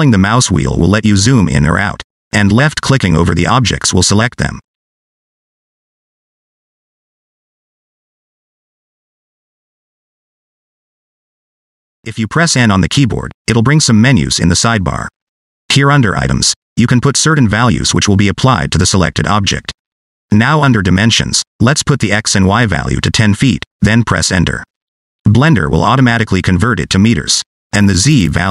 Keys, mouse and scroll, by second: 1.2-1.8 scroll down 3, 1.8-2.3 scroll up 5, 2.3-3.4 scroll down 2, 3.9 click, 4.8 click, 5.4 click, 12.3 click, 12.7 click, 14.2 n, 16.7 click, 19.6 click.